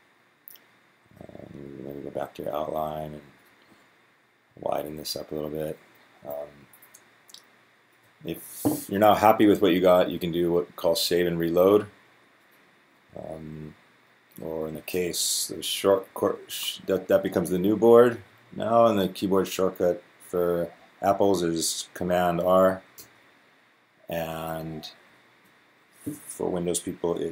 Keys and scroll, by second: 4.4 Down, 4.5 Down, 5.0-7.7 Down, 15.7 Down, 15.8 Down, 16.0 Down, 16.2 Down, 16.3 Down, 16.4 Down, 16.6-18.6 Down, 17.0 Up, 17.1 Up, 17.2 Up, 17.4-23.2 Up, 18.1 Down, 18.3 Down, 18.9 Down, 21.9-23.2 Down, 22.8 super+r, 24.3 Left, 24.4 Left, 24.6 Up, 24.9 Up, 25.3 Right.